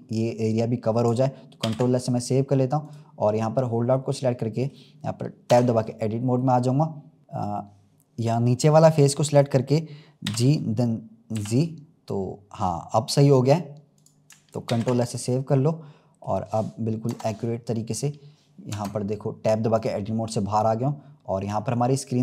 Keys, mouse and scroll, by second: 1.6 ctrl+s, 2.7 click, 3.6-4.1 scroll down 2, 4.1-5.4 middle drag, 5.4 Tab, 5.9-6.3 scroll up 2, 6.3 middle click, 7.2 click, 10.2 g, 14.6 ctrl+s, 14.9 click, 15.5-17.0 middle drag, 17.0 KP_0, 18.7 Tab, 19.7 click, 20.7-21.1 scroll down 2.